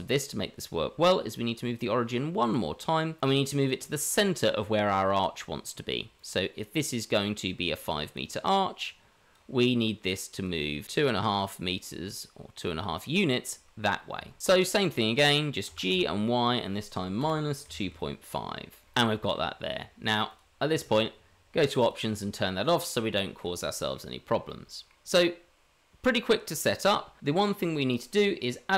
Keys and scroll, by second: 14.4-15.1 ctrl+z.